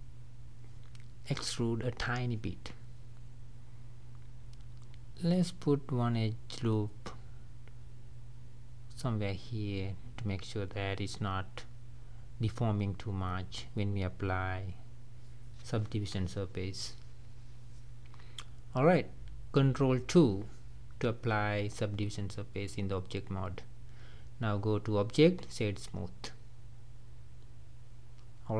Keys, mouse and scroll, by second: 0.7 scroll down 2, 1.1-4.9 middle drag, 5.0-9.4 drag, 9.7-11.6 middle drag, 11.6 scroll down 3, 11.8 scroll up 1, 11.9-13.7 middle drag, 13.7 Tab, 14.1 middle click, 14.6-15.0 scroll up 4, 17.7 ctrl+2, 18.4 click, 18.8-19.5 middle drag, 19.5 scroll down 3, 19.8-20.9 middle drag, 20.9-21.2 scroll up 3, 21.2-22.0 middle drag, 22.0 click, 23.3-24.7 drag, 25.0-25.6 middle drag, 25.6 scroll down 3, 25.8-28.5 middle drag, 28.5 ctrl+s.